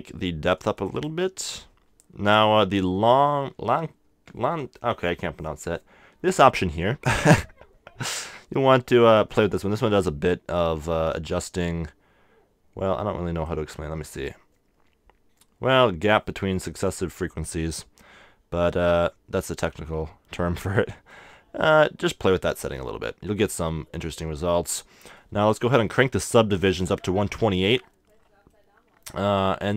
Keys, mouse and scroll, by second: 0.6-2.8 drag, 7.2-9.1 drag, 17.5-19.4 drag, 21.1-23.0 middle drag, 24.1-25.8 middle drag, 25.8-27.9 drag, 28.5-29.7 middle drag.